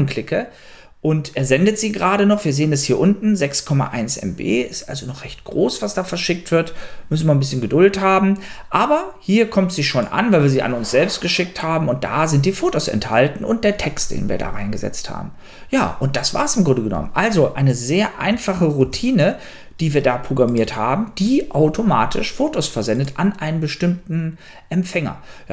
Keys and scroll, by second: 19.1 super+q.